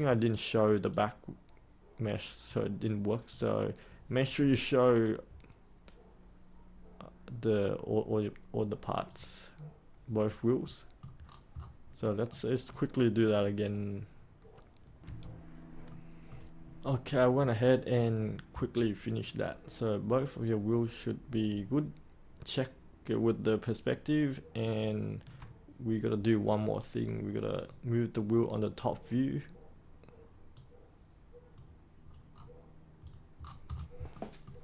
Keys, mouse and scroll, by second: 10.6 middle click, 11.2 scroll down 1, 11.9 middle click, 14.9 3, 15.8 middle click, 16.6 scroll up 1, 16.8-18.0 scroll down 1, 18.0 click, 18.7-25.2 alt+drag, 27.5-32.0 drag, 32.0 scroll up 1, 32.3-33.0 scroll down 1, 33.0 click, 33.4-34.1 scroll down 2, 34.1 middle click.